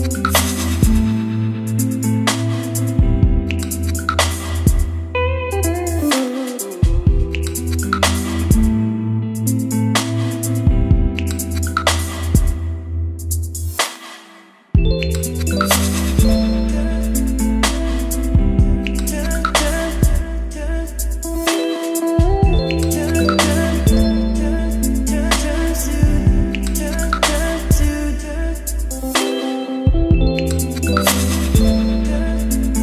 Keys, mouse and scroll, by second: 0.0-0.6 typing, 2.0 b, 2.3 7, 2.8 Right, 3.0 Return, 4.8 click, 5.0-6.6 typing, 7.7 Return, 8.1-9.0 typing, 9.9 Return, 10.1-14.3 typing, 12.0 Return, 13.1 Return, 16.4 click, 16.7 Return, 17.1-20.9 typing, 22.1-26.4 typing, 23.1 Return, 23.7 Return, 27.9-31.0 typing, 31.6-32.8 drag.